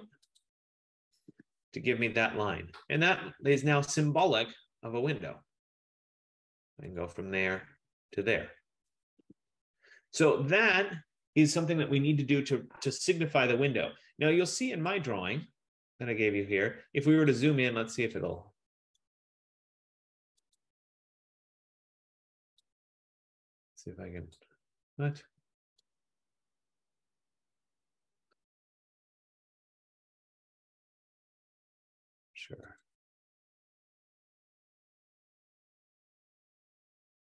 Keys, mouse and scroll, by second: 0.6 click, 1.4 Return, 4.5 click, 7.0 click, 8.4 click, 9.2 Return, 15.0 click, 17.5 click, 18.2 click, 18.4 click, 19.3 right click, 20.6 click, 22.8 click, 24.5 click, 26.0 right click, 29.1 click, 30.0 F15, 33.1 click, 35.5 click.